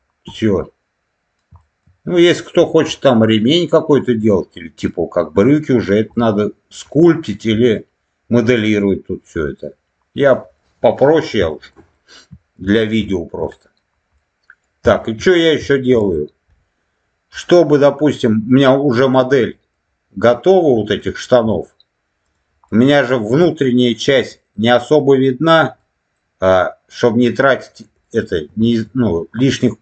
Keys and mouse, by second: 0.2-1.3 middle drag, 1.5 shift+middle click, 2.2 middle click, 2.9 middle click, 4.0 middle click, 4.8 middle click, 6.1 middle click, 6.8 middle click, 7.5 middle click, 9.3 middle click, 10.5 middle click, 11.4 shift+middle click, 11.9 middle click, 13.1 shift+middle click, 13.4 middle click, 14.1 middle click, 14.9 shift+middle click, 15.5 shift+middle click, 17.3 middle click, 18.4 middle click, 19.4 middle click, 21.0 shift+middle click, 22.1 click, 22.6 middle click, 23.3 middle click, 24.3 middle click, 25.7 middle click, 27.5 click, 27.9 middle click, 28.6 shift+middle click, 29.3 middle click.